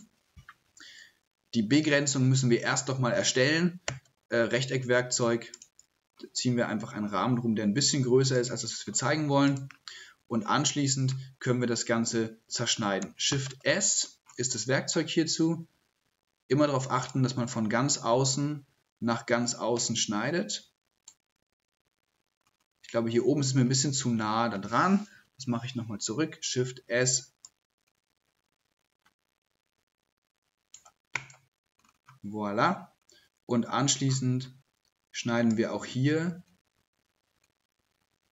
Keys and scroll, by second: 13.0 shift+h, 13.3 shift+s, 26.1 shift+s, 26.5 shift+s.